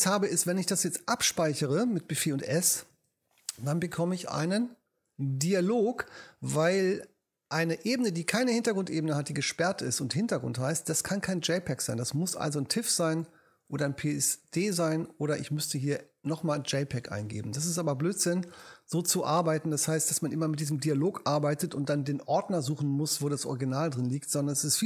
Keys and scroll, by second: 2.8 super+s.